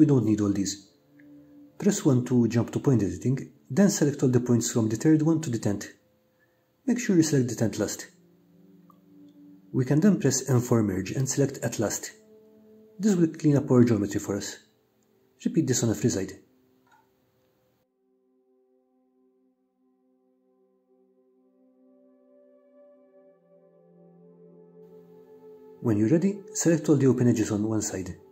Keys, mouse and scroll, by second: 0.7 click, 2.7-4.1 middle drag, 5.2 1, 7.8 click, 11.4 ctrl+shift+click, 13.9 m, 17.3 click, 18.0 click, 19.3 click, 19.8 middle click, 20.0 click, 20.1 click, 20.5 click, 21.0 click, 21.6 m, 21.7 middle click, 21.9 shift+middle click, 22.1 middle click, 23.1 shift+click, 23.5 m, 24.0 click, 24.4 m, 25.3 2.